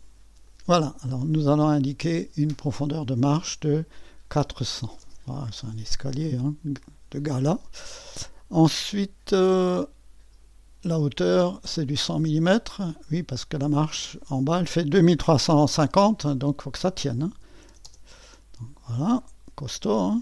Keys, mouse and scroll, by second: 0.4-4.3 drag, 4.3 KP_4, 4.7 KP_0, 5.0 KP_0, 6.8-16.1 drag, 9.0-9.8 typing, 17.1-18.1 typing, 19.1-20.2 drag.